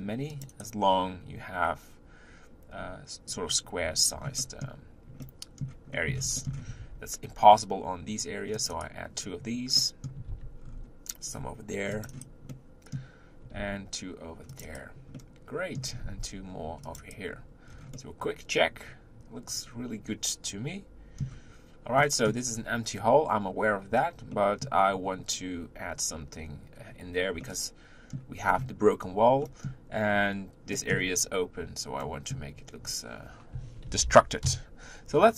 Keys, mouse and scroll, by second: 2.8-4.1 scroll up 2, 4.1 scroll down 3, 4.4-6.5 middle drag, 6.5 scroll up 1, 6.7 ctrl+r, 9.7 middle click, 10.2 ctrl+r, 12.1-12.5 scroll up 1, 12.5-13.6 middle drag, 13.6 ctrl+r, 15.1 middle click, 16.0 ctrl+r, 17.6 scroll down 4, 17.9-21.0 middle drag, 22.0 middle click, 22.5 scroll up 3, 24.3 middle click, 25.1-26.6 scroll up 2, 27.4-28.4 middle drag, 28.4-29.4 scroll down 2, 29.4 middle click, 30.1-30.7 scroll up 2, 30.7-33.8 middle drag, 33.8 ctrl+l, 34.4 KP_1.